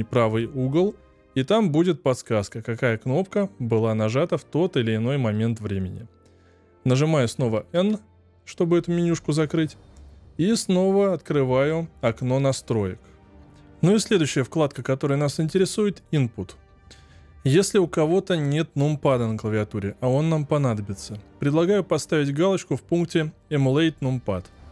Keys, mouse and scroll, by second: 7.7 n, 9.9 click.